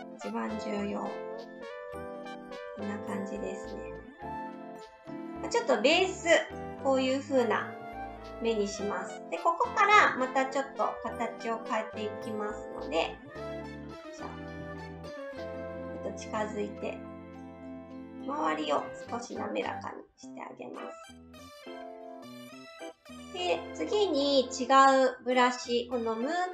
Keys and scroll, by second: 16.3 s.